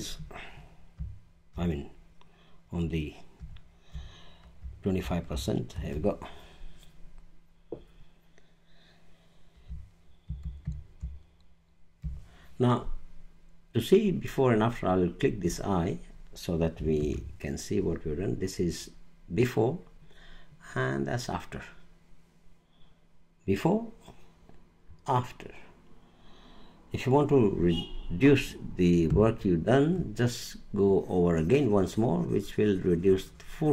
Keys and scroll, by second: 5.7 super+0, 10.2 super+=, 17.0 super+=.